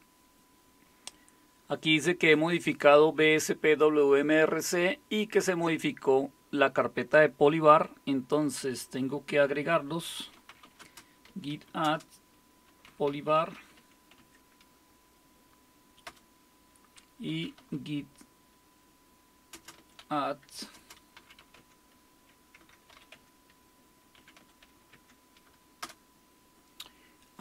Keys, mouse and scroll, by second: 10.1-14.2 typing, 16.0 Return, 17.1-18.1 typing, 19.5-25.8 typing.